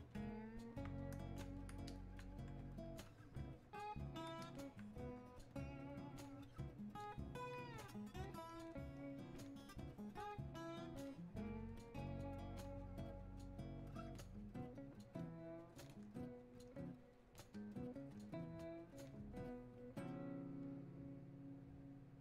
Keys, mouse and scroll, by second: 0.1-1.9 drag, 4.4-22.2 alt+drag.